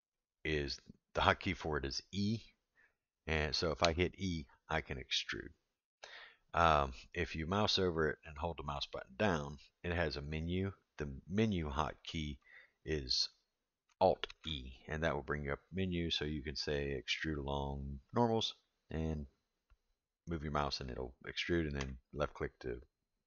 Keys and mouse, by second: 3.8 e, 7.9-12.4 drag, 14.3 alt+e.